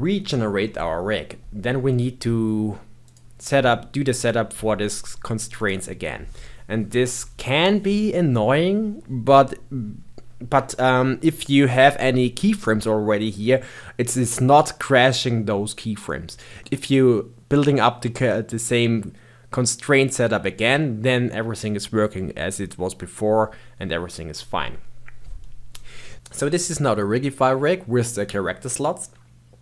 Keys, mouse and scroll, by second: 3.0-3.3 drag, 3.3-4.1 scroll up 2, 4.1-8.5 drag.